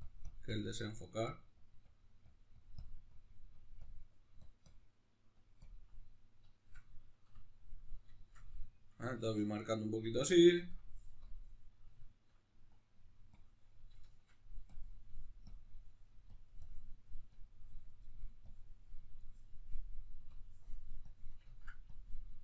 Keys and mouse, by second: 0.9 middle click, 1.3-4.9 drag, 4.9 middle click, 5.4 click, 5.9-11.3 middle drag, 11.3 click, 11.7-12.7 middle drag, 12.7-14.0 drag, 14.0 shift+middle click, 14.7-18.1 drag, 18.1 middle click, 18.5-21.5 drag, 21.5 ctrl+middle click, 21.9-22.4 drag.